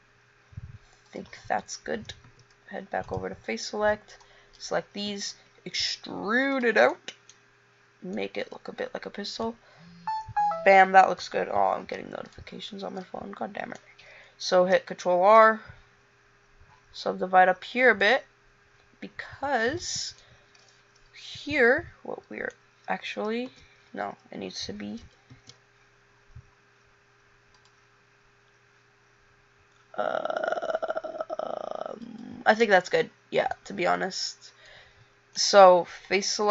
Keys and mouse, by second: 2.4 a, 4.0 b, 5.2 e, 7.1-10.4 middle drag, 11.9 a, 14.7 ctrl+r, 20.6-22.7 drag, 23.6 ctrl+z, 25.1 ctrl+t, 25.5 ctrl+r, 33.0 a.